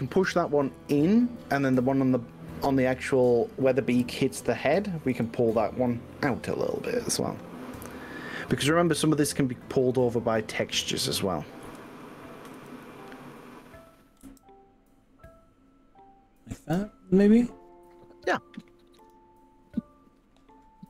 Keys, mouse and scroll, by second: 1.8 click, 2.1-3.4 middle drag, 4.0 KP_1, 5.1 g, 8.6 click, 9.6 click, 10.3 middle click, 11.7 KP_1, 12.6 KP_3, 14.4 g, 16.8 click, 19.2 click.